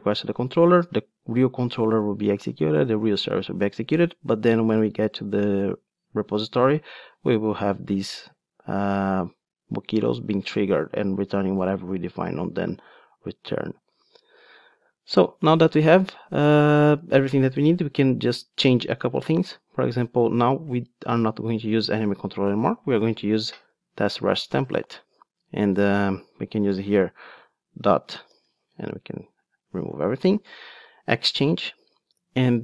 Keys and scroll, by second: 23.7 Return, 30.9 Return.